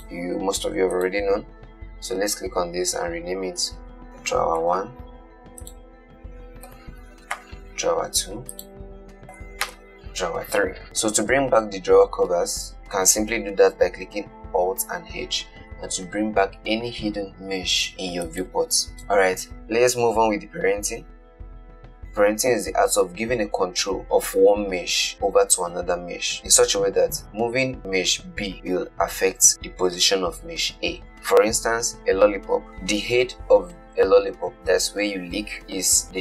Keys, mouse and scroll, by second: 0.2 click, 0.5 h, 1.3 click, 3.8 F2, 4.0 BackSpace, 5.9 click, 7.0 F2, 8.8 click, 9.2 F2, 14.3 alt+h, 18.5 click.